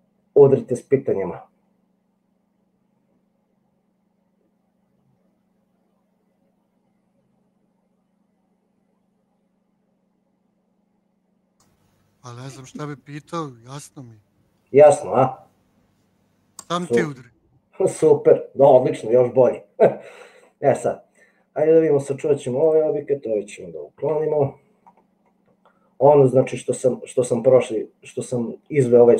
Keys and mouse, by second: 24.2 Delete, 25.6-27.2 middle drag, 27.3 middle click, 27.8-28.8 middle drag.